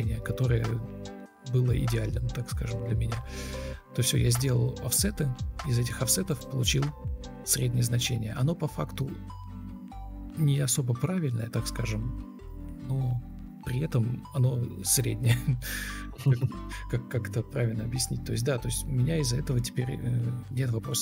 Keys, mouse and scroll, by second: 2.6 shift+r, 3.5 ctrl+x, 3.7 Delete, 3.8 ctrl+v, 5.1 Delete, 5.5 ctrl+c, 6.3 Escape.